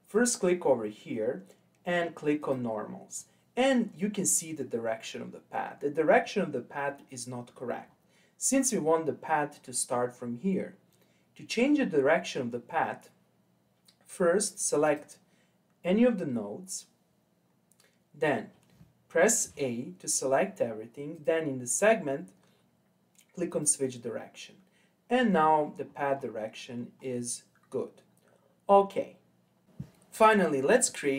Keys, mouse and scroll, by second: 0.1-3.1 drag, 3.1-6.9 scroll up 7, 6.9-7.8 scroll down 4, 7.8-10.9 scroll up 3, 11.8-14.8 scroll down 2, 14.8 click, 19.4 a, 21.1-24.1 drag, 25.8-26.6 scroll up 6, 26.6-29.7 scroll down 10.